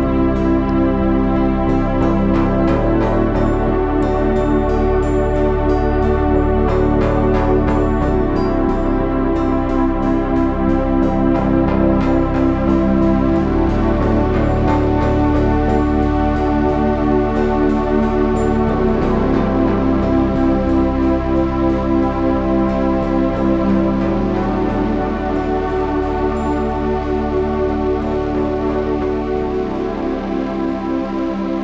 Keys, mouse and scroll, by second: 0.3 Tab, 5.7 g, 10.7 r, 12.3 Tab, 19.3 r, 22.3 ctrl+r, 23.3 Tab.